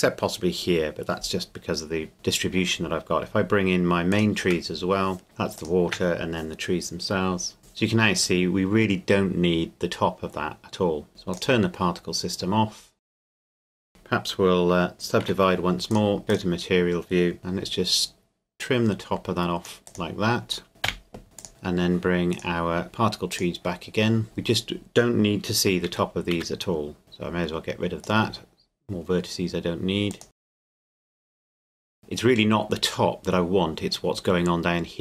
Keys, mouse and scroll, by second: 4.1 shift+click, 5.6 shift+click, 11.3 click, 13.4 right click, 13.7 Tab, 14.9 a, 15.2 w, 15.9 click, 19.8 right click, 20.8 x, 21.4 click, 22.3 right click, 23.3 click, 24.2 Tab, 25.9 a, 26.4 a, 27.0 click, 30.1 click.